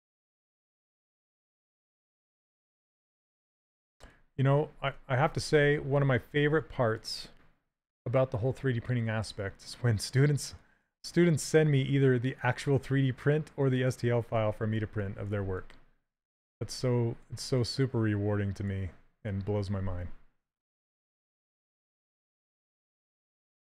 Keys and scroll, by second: 1.4 s, 6.2 s, 14.6 s, 22.4 s.